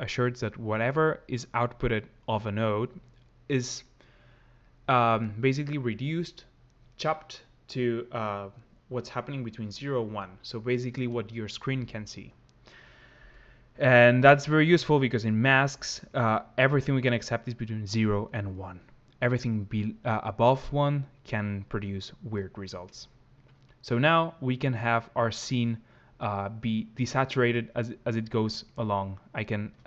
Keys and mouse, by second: 14.2 click, 16.3 click, 23.6 click.